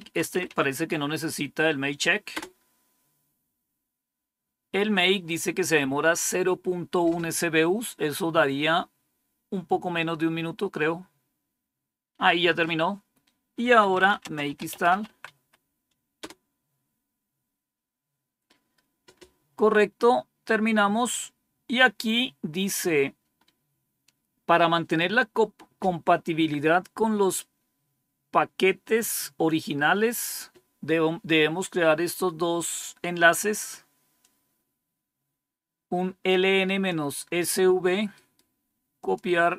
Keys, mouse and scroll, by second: 0.0-0.9 typing, 2.2 Return, 13.3-15.8 typing, 16.1 Return, 20.3-20.8 scroll down 2, 34.1-36.8 drag, 38.0 right click, 38.9 click.